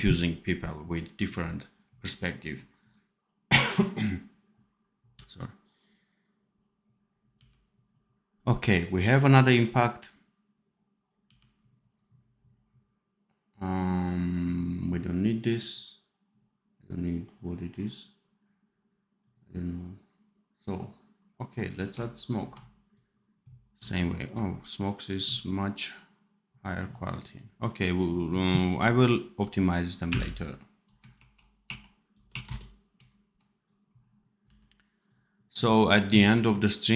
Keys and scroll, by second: 7.3 d, 11.2 d, 34.3 v.